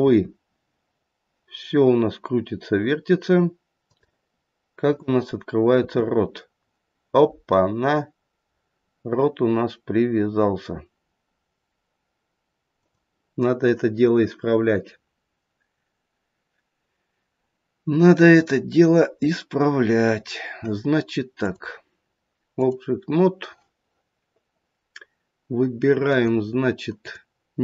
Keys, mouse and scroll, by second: 0.1 r, 4.8 click, 5.8 r, 21.3 click, 26.0 click, 26.9 click.